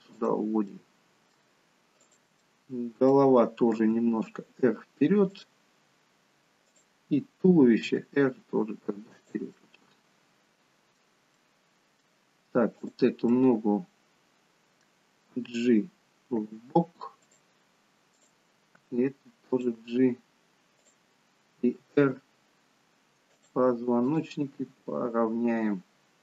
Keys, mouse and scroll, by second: 0.6 middle click, 2.0 click, 2.4 middle click, 3.8 r, 6.7 click, 7.9 r, 9.5 middle click, 12.6 middle click, 12.7 click, 13.3 middle click, 15.3 g, 18.1 click, 18.7 g, 20.8 click, 21.8 r, 24.0 click, 24.6 r.